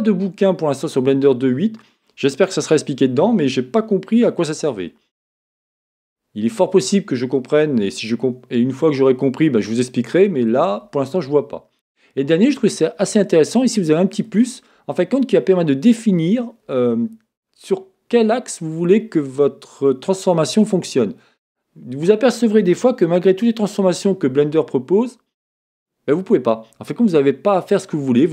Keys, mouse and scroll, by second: 12.5-28.3 drag, 23.2 Escape.